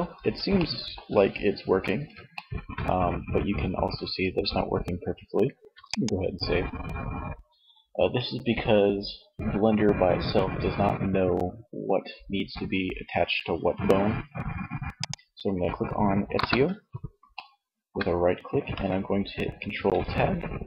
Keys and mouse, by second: 0.7 a, 4.4 ctrl+s, 14.2-15.3 right drag, 15.4 KP_1, 19.3 ctrl+Tab.